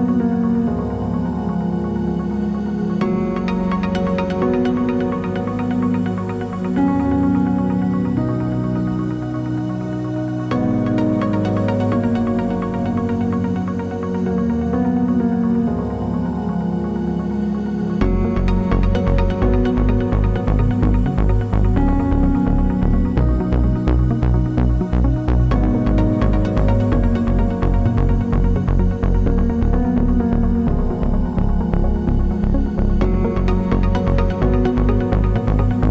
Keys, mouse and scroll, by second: 0.3 click, 1.0 scroll up 1, 1.1 middle click, 1.4 alt+d, 1.8 click, 2.3 alt+d, 2.8 click, 3.0 alt+d, 3.5 click, 3.7 alt+d, 4.2 click, 4.3 middle click, 4.4 scroll down 2, 5.3 click, 5.3 alt+d, 6.0 click, 6.2 alt+d, 6.7 click, 6.9-7.9 middle drag, 7.2 scroll down 2, 7.5-7.9 scroll up 2, 7.9 shift+right click, 8.6 shift+a, 8.9 Tab, 9.6 shift+Tab, 10.0 s, 10.5 click, 10.8 s, 11.2 click, 11.3 scroll, 11.4-12.5 shift+middle drag, 12.0 scroll down 1, 12.2 s, 12.5 click, 12.8 g, 13.3 click, 14.2 alt+click, 14.6 g, 15.1 click, 15.3 e, 15.3 click, 15.4 s, 15.7 Tab, 16.9 a, 18.0 g, 18.0 click, 18.1 Tab, 18.6 scroll down 1, 18.8-20.0 middle drag, 19.0 shift+Tab, 19.5 alt+d, 20.0 click, 20.0 shift+middle click, 20.3 alt+d, 20.6 click, 20.8 alt+d, 21.1 click, 21.2 middle click, 21.2 scroll, 21.4 alt+d, 21.8 click, 21.9 alt+d, 22.3 click, 22.3 alt+d, 23.0 click, 23.5 alt+d, 23.9 click, 24.1 shift+middle click, 24.5 alt+d, 24.5 right click, 25.0 click, 25.1 alt+d, 25.5 click, 25.8 alt+d, 26.2 click, 26.3 alt+d, 26.9 click, 27.0-28.5 shift+middle drag, 28.0 alt+d, 28.5 click, 28.6 alt+d, 29.3 click, 29.3 alt+d, 29.7 click, 30.6 click, 30.7 alt+d, 31.1 click, 31.6 shift+middle click, 32.0 alt+d, 32.9 click, 33.5 middle click, 33.9 alt+d, 34.7 click, 34.8 middle click, 35.5 click.